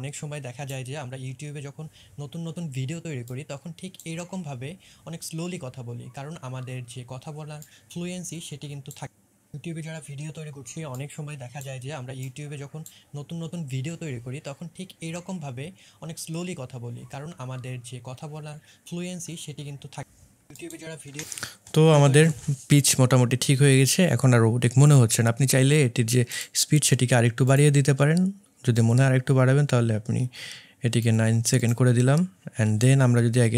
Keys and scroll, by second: 21.1 space, 21.9 space, 22.2 space.